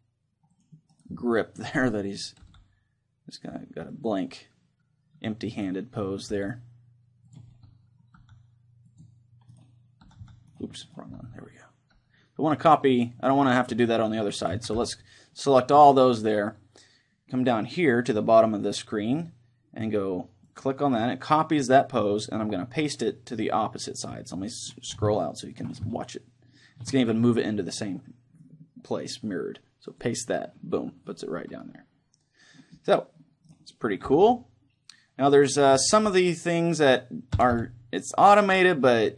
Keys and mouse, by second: 0.8 click, 1.4 s, 2.6-4.0 drag, 2.6 r, 4.2-5.9 drag, 4.3-5.9 middle drag, 5.6-7.4 right drag, 6.5 r, 7.6-11.4 drag, 8.4 r, 10.2-12.6 right drag, 10.2 r, 11.4 r, 13.8-15.0 drag, 14.6 a, 15.0 c, 15.9-17.6 right drag, 20.5-22.2 drag, 25.2-27.8 middle drag, 29.9-31.8 drag, 31.1-34.4 middle drag, 33.5-35.4 right drag, 36.0 r, 37.2-39.0 right drag, 37.6 r.